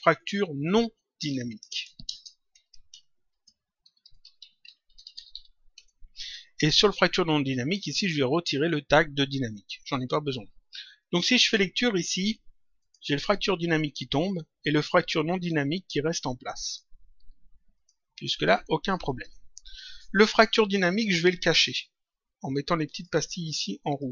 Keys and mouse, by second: 1.2 End, 1.5-5.7 typing, 7.8 click, 9.8 Delete, 11.3 click, 12.7 click, 16.6 click, 17.7 click, 19.0 click, 20.8 click, 22.8 click.